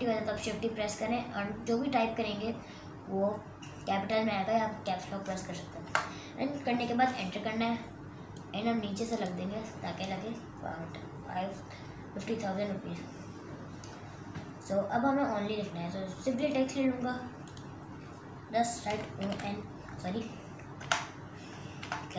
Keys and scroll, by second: 6.1 Return, 18.8-20.7 typing.